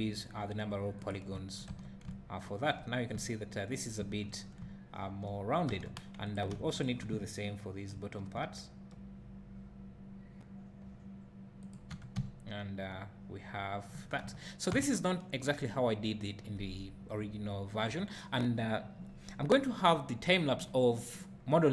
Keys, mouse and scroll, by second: 1.1 click, 1.3 `, 1.7 Tab, 2.1 `, 3.3 middle click, 5.7 Tab, 6.2 click, 6.7 shift+click, 8.0 ctrl+b, 11.8 click, 12.0 Tab, 12.2 `, 14.3 Tab.